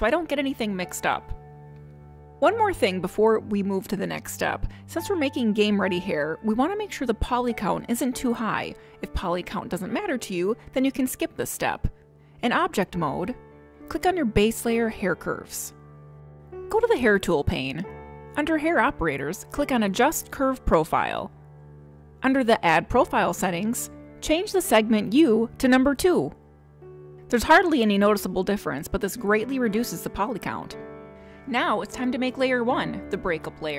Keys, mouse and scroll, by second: 14.6 click, 18.3 click, 21.8 click, 25.5 click.